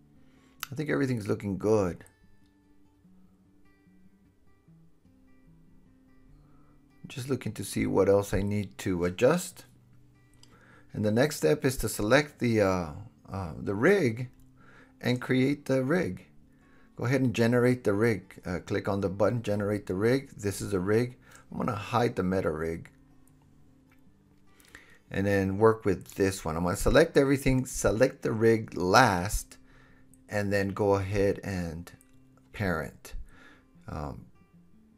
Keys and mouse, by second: 2.7 Tab, 3.6-4.8 middle drag, 3.6-4.8 right drag, 4.8 KP_3, 5.7 KP_3, 9.3 KP_7, 10.8 super+s, 15.4 middle click, 15.4-17.5 drag, 17.5-22.9 middle drag, 22.9-27.4 drag, 27.9-30.6 drag, 34.1 super+p.